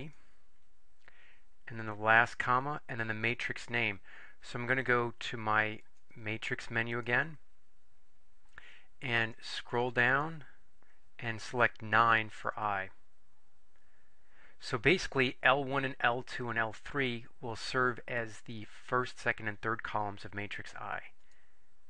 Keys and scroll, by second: 0.1 3, 2.3 ,, 9.5 Down, 10.1 Down, 10.7 Down, 12.5 Down, 12.5 Return, 21.3 Return.